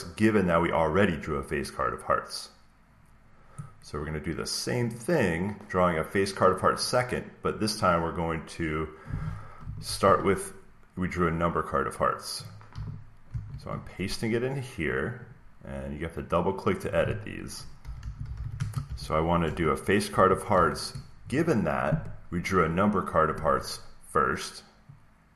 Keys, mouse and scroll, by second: 4.9-6.9 drag, 9.5 click, 9.8 ctrl+c, 12.0 click, 13.2 ctrl+v, 15.1 click, 15.2 click, 16.2 click, 17.5-20.0 typing.